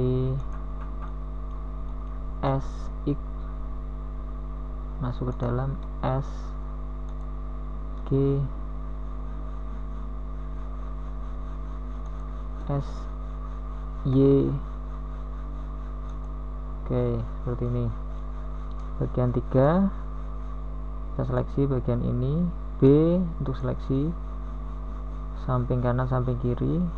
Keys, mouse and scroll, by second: 2.3 u, 6.5 g, 10.5 s, 14.5 s, 16.9 g, 21.8 s.